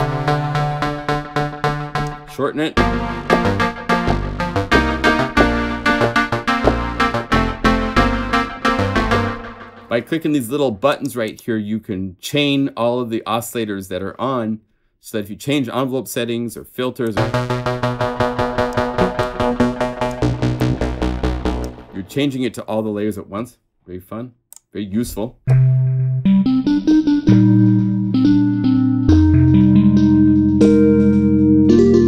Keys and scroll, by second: 2.8 F3, 3.2 F3, 3.8 F3, 4.3 F3, 7.3 F1, 7.6 F1.